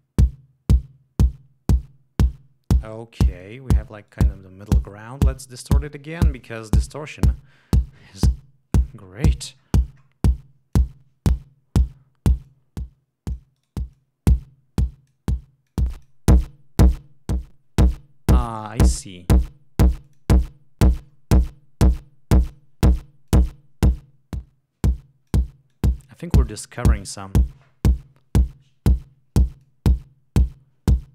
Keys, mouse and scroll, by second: 3.3 click, 4.0 right click, 8.8-10.2 scroll down 4, 10.7 click.